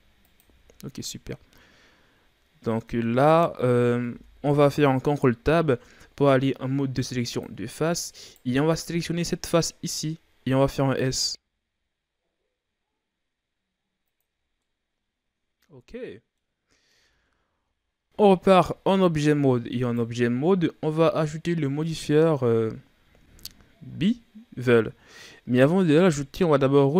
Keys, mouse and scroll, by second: 0.5 z, 0.7-1.1 scroll down 4, 1.1-3.3 middle drag, 3.3-4.1 scroll up 1, 4.1 ctrl+Tab, 8.2 right click, 11.1 s, 14.5 scroll down 1, 14.6-16.6 middle drag, 16.6-17.0 scroll up 2, 17.0 Tab, 18.9 a, 19.8 right click.